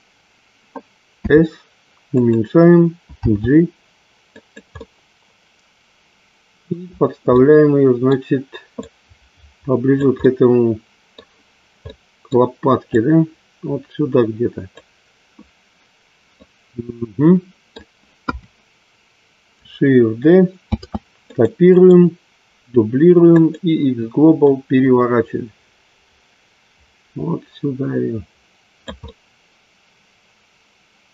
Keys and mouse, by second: 1.2 s, 3.2 g, 4.8-6.6 middle drag, 7.8 middle click, 8.8-9.9 drag, 10.2-11.8 middle drag, 11.9 middle click, 12.9-14.8 drag, 16.4-17.6 middle drag, 19.0 KP_1, 20.6 shift+d, 21.3 click, 21.6-23.5 right drag, 25.2-28.8 drag, 29.0-31.1 middle drag.